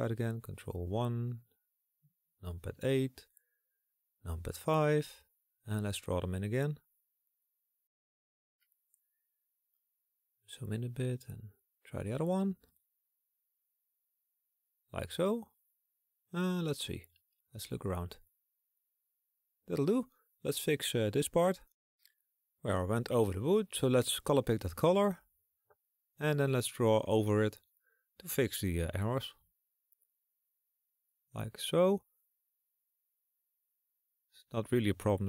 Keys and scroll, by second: 0.0 KP_8, 1.3 KP_5, 5.8 KP_8, 24.7 s, 27.3 s.